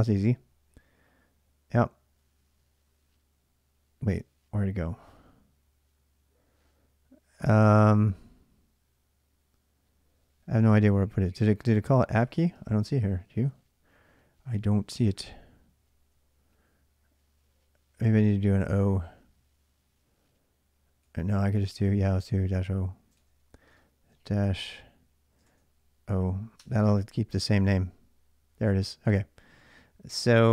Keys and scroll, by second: 11.9-12.8 typing, 16.2 ctrl+a, 16.3 ctrl+a, 21.0 ctrl+a, 21.5 ctrl+[, 21.7-23.6 typing, 25.3 shift+o, 26.4 Return, 26.4-27.7 typing.